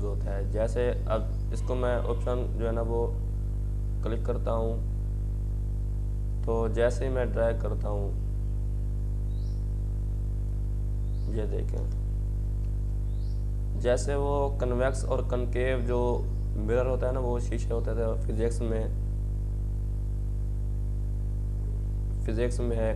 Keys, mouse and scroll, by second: 0.0-1.9 typing, 1.8-10.6 drag, 10.4-11.1 typing, 10.6-17.4 drag, 16.7-17.5 typing.